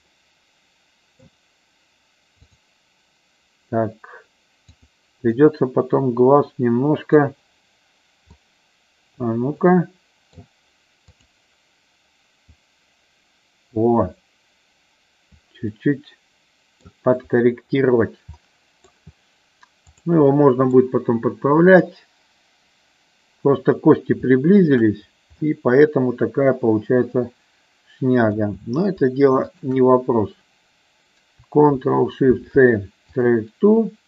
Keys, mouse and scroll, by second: 0.1-1.2 middle drag, 2.5 click, 4.7 click, 5.5-7.2 middle drag, 8.3 click, 9.6 middle click, 11.1 click, 12.6-15.4 drag, 15.9-17.0 middle drag, 18.3 middle click, 20.3 middle click, 21.7-22.9 drag, 24.2 shift+middle click, 25.4-28.3 middle drag, 29.5 shift+click, 32.2 ctrl+shift+c.